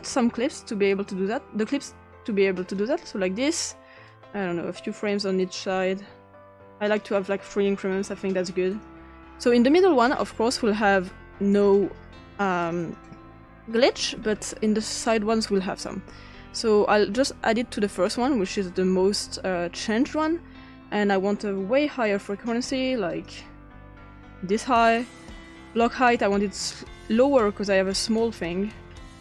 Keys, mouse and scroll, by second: 0.9 click, 2.8 click, 4.1 click, 5.4 click, 7.2 click, 8.7 click, 10.6 s, 11.5 click, 12.6 click, 12.7-14.3 typing, 12.8 click, 15.8-17.0 drag, 17.7 click, 18.4 click, 22.1 click, 23.1 click, 24.0 click, 24.3 click, 27.8 click, 29.1 click.